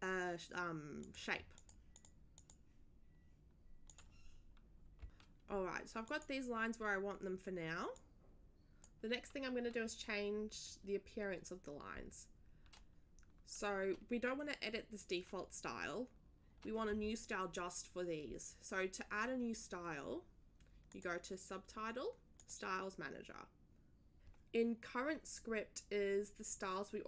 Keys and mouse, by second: 1.0 click, 1.5 drag, 1.9 drag, 2.3 click, 3.9 click, 5.0 ctrl+z, 6.0 click, 7.9 click, 20.9 click, 22.4 click.